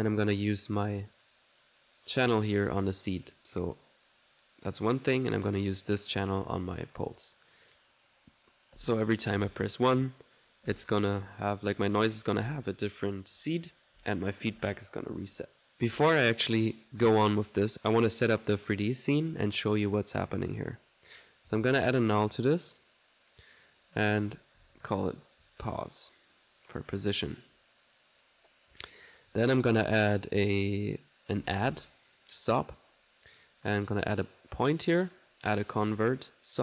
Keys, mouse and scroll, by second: 0.1 alt+click, 2.8 click, 4.2 click, 5.2 click, 5.9-7.0 drag, 7.8 click, 8.1 click, 8.8 alt+1, 9.8-10.8 typing, 10.4 click, 11.6 click, 13.9 typing, 15.0 middle click, 15.0 typing, 15.3 click, 17.3 click, 20.7 middle click, 21.2-22.0 typing, 22.8 click, 23.7 click, 26.4 click, 27.6-30.5 drag, 31.0 click, 31.2-32.2 typing, 32.2 click, 32.8 click, 33.8 click, 34.2 click, 35.2 right click, 35.3-36.0 typing.